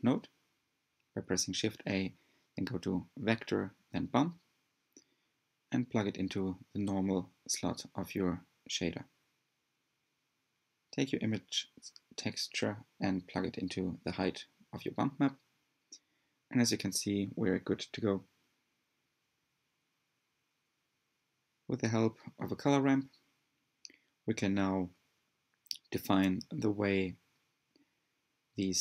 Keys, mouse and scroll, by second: 0.9-6.3 drag, 6.6-9.1 drag, 13.9 click, 20.3-21.2 scroll up 4, 22.1 click, 22.9 click, 25.1-28.8 drag.